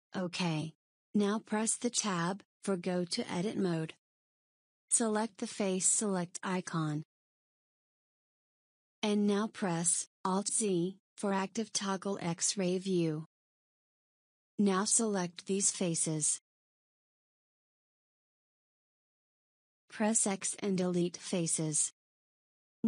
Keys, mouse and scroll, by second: 2.6 Tab, 9.2 click, 11.8 alt+z, 14.8 click, 16.2 click, 21.1 x.